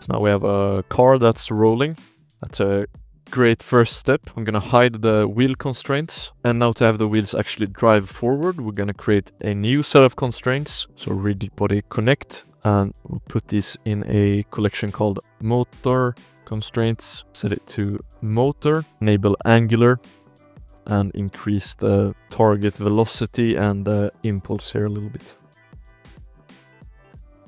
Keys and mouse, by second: 0.9 drag, 3.5 click, 3.9 space, 4.2 x, 4.3 ctrl+s, 4.3 x, 5.2 click, 5.8 shift+drag, 6.7 middle click, 7.7 shift+middle drag, 8.1 middle click, 8.6 shift+click, 9.6-11.8 drag, 12.1 shift+drag, 12.6 m, 17.3 click, 18.1-18.7 drag, 18.9 ctrl+alt+s, 19.5 shift+click, 19.8 ctrl+s, 20.4-21.4 drag, 20.8 o, 20.9 o, 22.0 click, 22.2 o, 23.6 click, 26.3-27.4 drag.